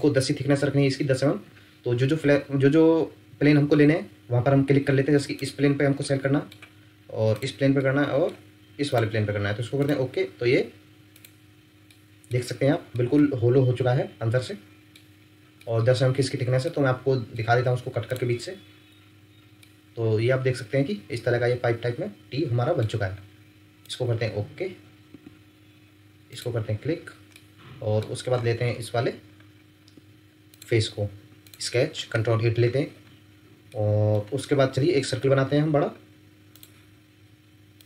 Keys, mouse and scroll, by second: 6.0 middle click, 11.9 middle click, 12.6 scroll down 1, 12.9 middle click, 14.9 scroll up 1, 15.6 middle click, 16.3-16.6 scroll down 1, 16.6 middle click, 18.7-19.0 scroll up 1, 19.6 middle click, 25.1 Escape, 26.9-27.3 scroll up 1, 27.3 middle click, 28.3-28.7 scroll up 1, 28.8-29.5 scroll down 1, 31.4 Escape, 32.1 ctrl+8, 33.7 ctrl+middle click, 34.1 ctrl+scroll down 1, 34.3 scroll up 1, 34.9 scroll down 1.